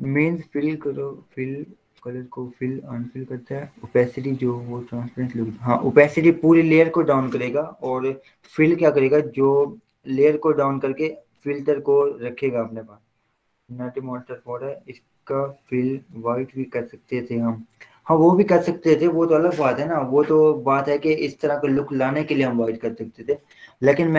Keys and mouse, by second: 21.9 click, 23.4 v.